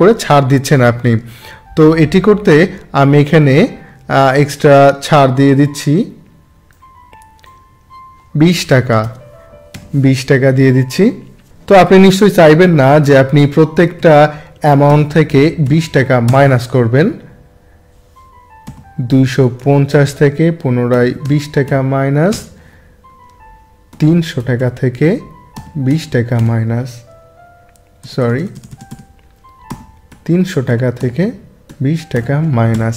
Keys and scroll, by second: 9.0 2, 13.0 =, 13.4 2, 15.6 0, 16.2 Return, 18.6 =, 21.6 0, 22.3 Return, 23.9 3, 28.0 BackSpace, 29.7 =, 32.1 0, 32.7 Return.